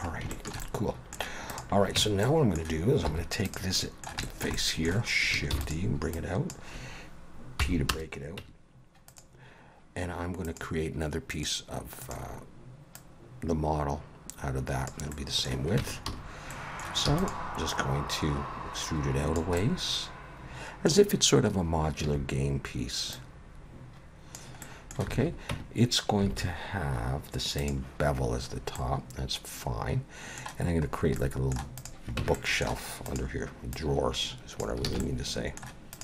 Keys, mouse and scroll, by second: 0.3 shift+middle click, 0.6 middle click, 1.5 click, 2.0 Tab, 2.2 middle click, 3.1 3, 3.5 click, 3.7 middle click, 4.2 shift+middle click, 4.6 middle click, 5.5 shift+d, 6.1 click, 7.6 p, 8.4 Tab, 9.1 click, 10.5 click, 13.0 click, 15.1 middle click, 15.8 Tab, 16.1 a, 16.5 middle click, 17.1 e, 17.7 click, 19.6 middle click, 22.0 a, 23.1 click, 24.6 middle click, 25.1 alt+a, 25.5 Tab, 26.3 alt+a, 27.6 click, 28.5 scroll up 2, 28.7 middle click, 30.9 scroll down 3, 31.1 middle click, 31.8 click, 32.2 Tab, 32.3 middle click, 33.1 click, 33.7 click, 34.9 alt+a, 35.0 middle click, 35.9 click.